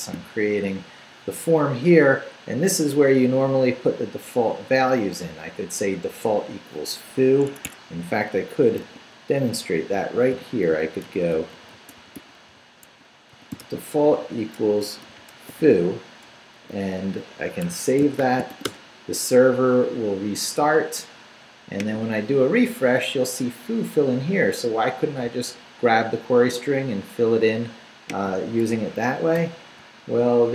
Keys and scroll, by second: 0.4 Down, 7.5 Escape, 7.9 Up, 8.6 shift+Up, 8.8 shift+a, 9.5 shift+Left, 10.2 Left, 10.3-16.6 typing, 17.6 shift+Escape, 18.0 shift+Escape, 18.2 shift+;, 18.5 shift+w, 18.7 Return, 29.3 super+r.